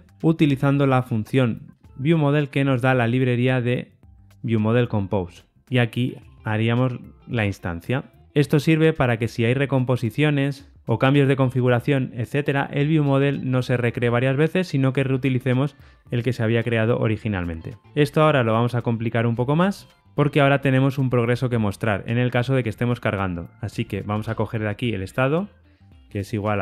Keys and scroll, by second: 2.1 Return, 7.2 Tab.